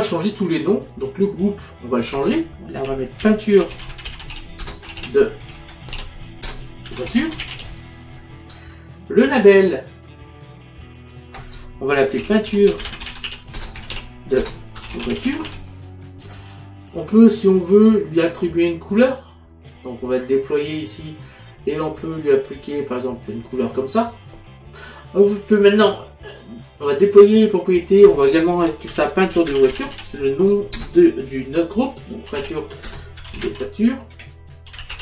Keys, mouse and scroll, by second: 0.2 click, 1.5 click, 3.3-7.6 typing, 9.3 click, 11.0 click, 12.3-15.5 typing, 16.9 click, 21.1 click, 25.7 click, 27.6 click, 29.0-30.8 typing, 32.4-35.0 typing.